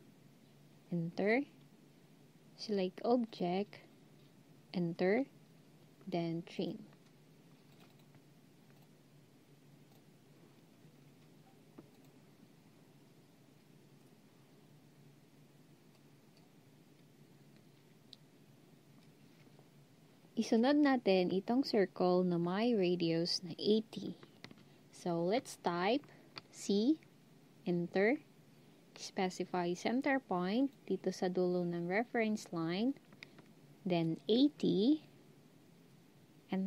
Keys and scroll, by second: 4.4 Return, 26.6 c, 34.0-34.7 typing.